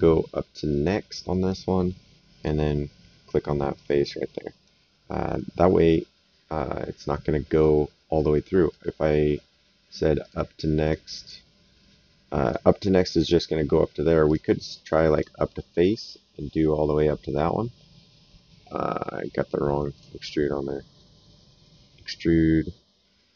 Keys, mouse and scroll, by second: 0.7 click, 1.3 right click, 2.4 click, 3.7 right click, 6.3 right click, 8.1 right click, 10.2 click, 12.4 click, 14.2 click, 19.9 click.